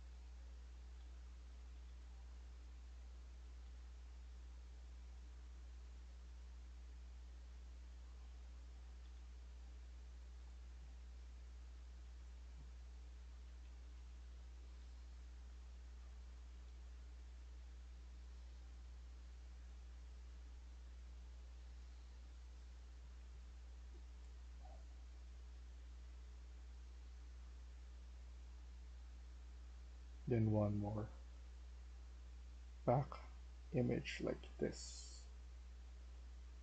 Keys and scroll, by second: 0.0-3.6 typing, 6.6-9.3 typing, 10.5-16.5 typing, 17.7-19.4 typing, 31.1 typing.